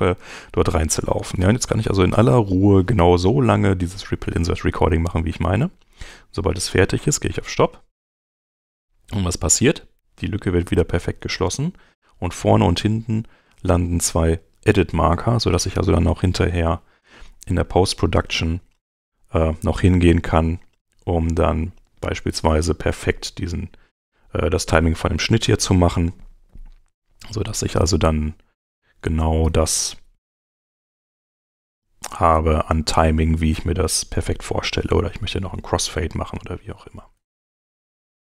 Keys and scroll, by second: 29.9 super+Home.